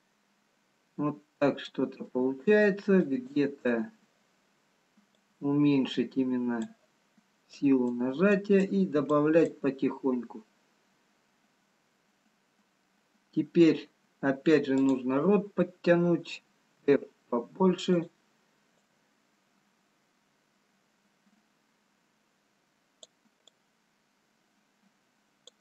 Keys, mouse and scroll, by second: 0.1 shift+click, 0.1 middle click, 3.1 click, 5.4 click, 14.8 click, 16.9 f, 19.1 click, 23.7 click.